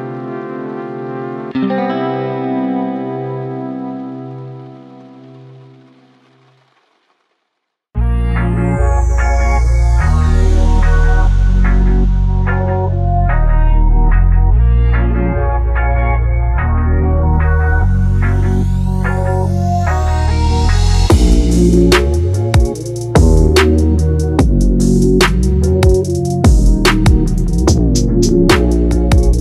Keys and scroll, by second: 0.6 ctrl+j, 1.0 ctrl+t, 5.3 ctrl+j, 5.5 ctrl+t, 11.6 ctrl+e, 14.5 ctrl+j, 20.9 ctrl+t.